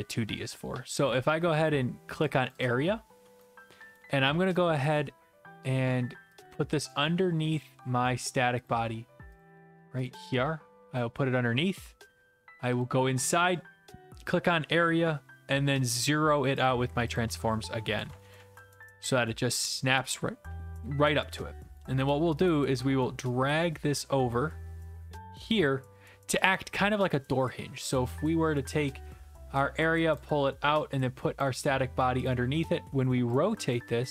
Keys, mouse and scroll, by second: 2.5 click, 2.6 click, 3.7 s, 4.0 right click, 4.9 right click, 8.0 click, 8.7 click, 9.4 click, 10.1 click, 11.0 click, 12.8 click, 13.5 click, 16.6 click, 17.2 click, 18.1 Tab, 18.4 Tab, 18.7 Return, 20.5-21.2 typing, 21.7-26.3 right drag, 26.3-28.0 typing, 26.3 click, 27.9 right click, 30.2 click, 32.3 click.